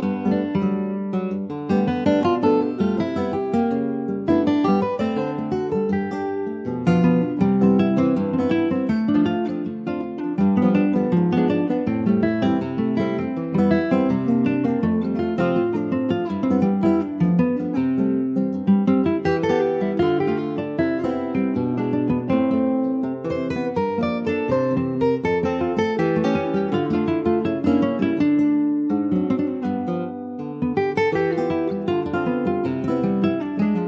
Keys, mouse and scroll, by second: 0.2 middle click, 0.9 click, 1.3-2.7 middle drag, 2.7-7.0 drag, 7.0 KP_9, 8.2 click, 8.9 middle click, 9.2-10.0 scroll up 5, 9.4 shift+middle click, 10.4 shift+middle click, 10.6-11.3 shift+scroll up 5, 11.4-13.2 middle drag, 13.2 click, 14.0 click, 15.5-16.9 drag, 16.9-17.5 scroll down 8, 18.0 click, 18.7 click, 19.0 ctrl+a, 20.2 alt+middle click, 20.5 alt+middle click, 21.6 shift+middle click, 22.2 scroll up 3, 23.1-23.5 scroll down 10, 23.9 shift+middle click, 24.2 shift+scroll up 1, 24.6 middle click, 24.8-25.3 scroll up 1, 25.4-25.8 scroll up 5, 25.8 shift+middle click, 26.7 ctrl+s, 28.2-32.9 drag, 33.0-33.6 scroll down 5, 33.6-33.8 middle drag.